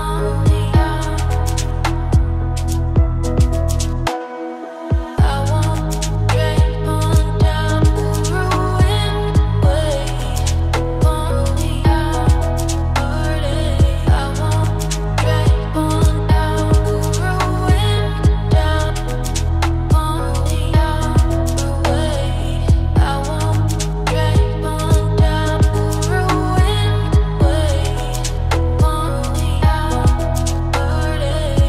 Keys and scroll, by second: 6.9 ctrl+z, 10.7 ctrl+space.